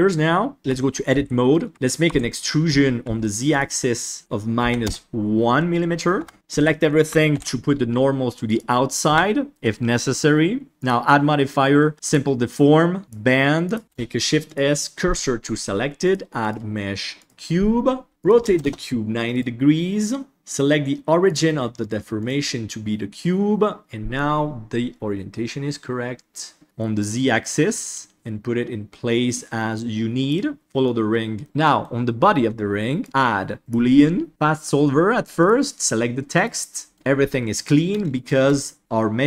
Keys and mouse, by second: 0.6 Tab, 1.1 a, 1.4 middle click, 2.0 e, 4.2 click, 6.1 Tab, 6.3 Tab, 6.5 a, 7.3 alt+n, 9.0 Tab, 10.8-12.1 drag, 13.7 click, 13.8 KP_1, 13.8 shift+s, 16.1-17.3 drag, 18.3 click, 19.3 right click, 21.2 click, 24.3-26.6 drag, 26.9 click, 27.6 middle click, 28.1-30.6 drag, 28.1 KP_1, 30.6 middle click, 31.4 middle click, 33.0-34.3 drag, 35.3 click, 37.5 middle click, 38.6 shift+middle drag, 38.9-39.2 middle drag.